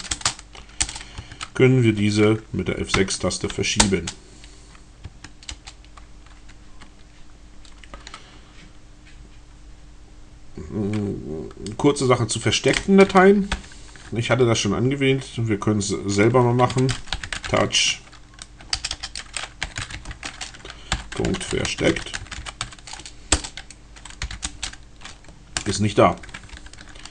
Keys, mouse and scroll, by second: 0.0-0.3 typing, 0.9 Return, 1.2 Tab, 2.5 F6, 3.7 Return, 5.1 Tab, 5.5 Return, 13.2 ctrl+o, 16.5-23.0 typing, 23.3 Return, 24.1 l, 24.4 s, 24.5 Return, 26.4 ctrl+o.